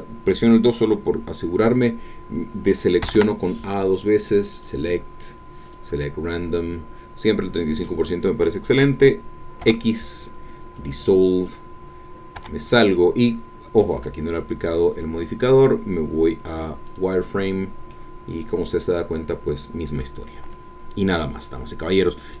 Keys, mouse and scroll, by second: 3.0 a, 4.5 click, 5.7 click, 9.6 x, 10.7 click, 12.4 Tab, 13.8 click, 16.8 click, 17.9-20.2 drag, 20.2 middle click, 20.3-20.6 scroll down 1, 20.6-22.0 middle drag, 22.0-22.4 scroll up 1.